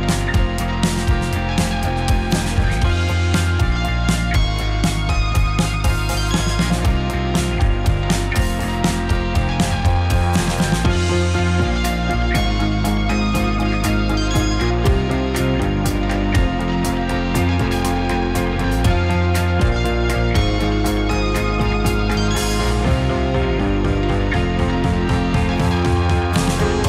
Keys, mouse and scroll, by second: 1.9 click, 3.0-6.2 drag, 4.5 Delete, 7.3 ctrl+click, 11.3 click, 16.2-16.8 drag, 17.3 click, 18.1-25.8 drag, 26.5 m.